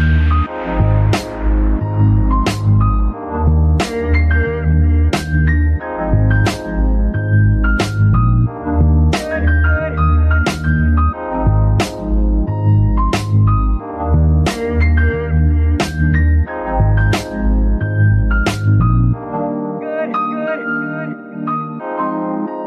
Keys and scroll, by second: 8.6 shift+Tab, 10.1 z, 11.8 s, 12.3 Tab, 14.1 z, 14.5 Tab, 15.0 s, 17.1 KP_3, 17.5 z, 19.1 g.